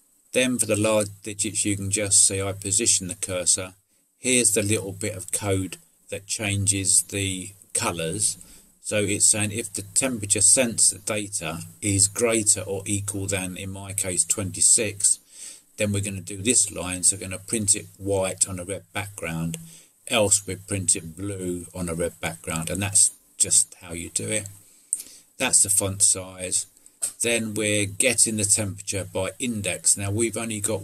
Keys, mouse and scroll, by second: 1.1 middle click, 23.4-24.4 middle drag, 25.1 middle click.